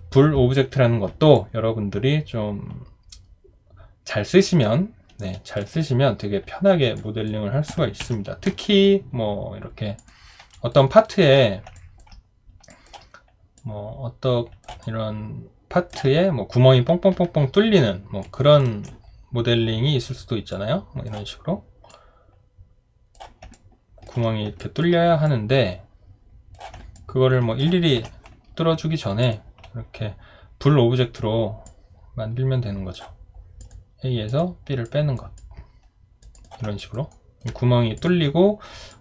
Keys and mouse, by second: 1.3 alt+click, 8.0 Delete, 10.5 alt+click, 10.9 alt+right click, 11.7 alt+click, 12.7 alt+click, 14.8 alt+click, 23.5 alt+click, 24.6 alt+click, 26.9 alt+click, 28.0 alt+w, 36.8 alt+click, 37.1 alt+right click.